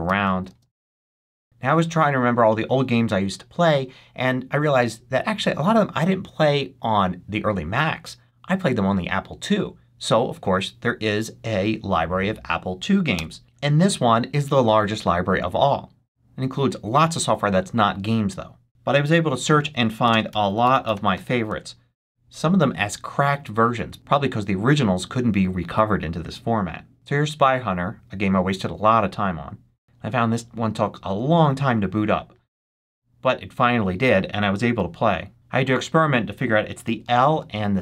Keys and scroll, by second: 0.0-1.3 typing, 1.4 ctrl+j, 19.1-21.5 typing, 35.5 i, 36.7 l.